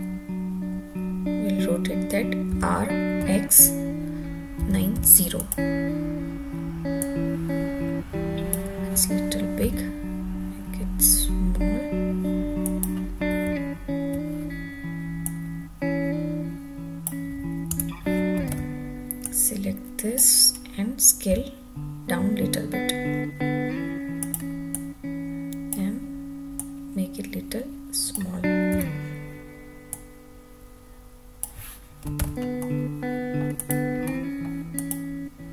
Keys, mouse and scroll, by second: 2.5 r, 3.2 x, 4.6 9, 4.9 0, 5.4 click, 7.0-8.5 drag, 9.6 s, 12.6 click, 13.4 `, 15.2-17.1 drag, 17.7 Tab, 18.4 alt+z, 19.2 click, 21.3 s, 24.2 click, 24.7-25.8 drag, 26.5 click, 28.7 Tab, 29.9 click, 32.2 alt+z, 32.6-33.4 middle drag, 33.6 click, 34.1-34.4 middle drag, 34.8 click.